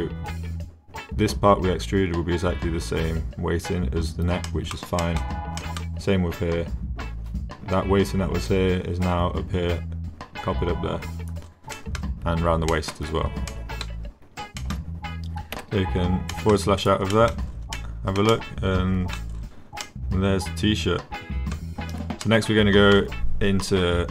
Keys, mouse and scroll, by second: 4.5 drag, 5.0 drag, 5.6 click, 11.7 drag, 12.7 drag, 13.5-13.8 drag, 14.6 shift+click, 15.6 KP_Divide, 16.3 drag, 17.1 middle click, 17.7 drag, 18.0 middle click, 18.3-19.2 drag, 19.8-21.4 drag, 22.2 click, 22.4-22.9 middle drag.